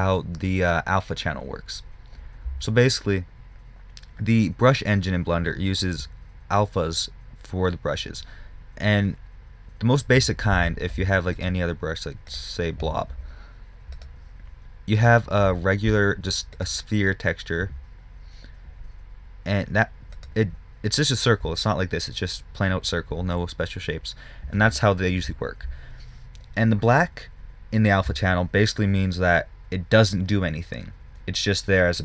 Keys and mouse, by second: 11.9-20.2 drag, 24.0-32.0 middle drag.